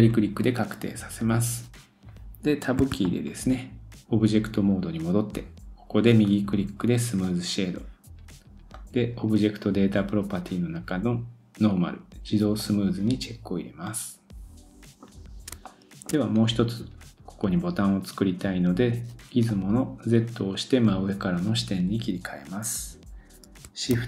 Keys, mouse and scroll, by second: 2.8 Tab, 6.2 right click, 8.7 click, 9.8 scroll down 2, 11.8-12.6 scroll down 2, 12.6 click, 13.4-13.8 scroll down 1, 13.8 middle click, 15.6 shift+middle click, 19.5 click, 23.9 shift+a.